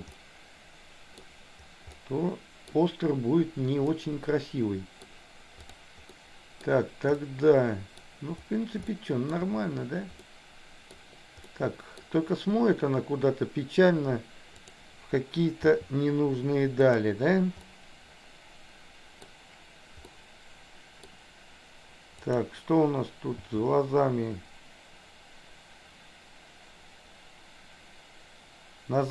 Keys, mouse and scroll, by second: 0.2-1.3 middle drag, 1.9 scroll up 1, 2.1 middle click, 2.8 scroll down 1, 3.9-5.0 middle drag, 5.0 scroll down 1, 5.1 middle click, 6.2 middle click, 7.3 middle click, 8.9 shift+middle click, 10.3 middle click, 11.4 middle click, 15.6 r, 17.7-19.3 middle drag, 20.1 middle click, 22.3 click, 23.4 g.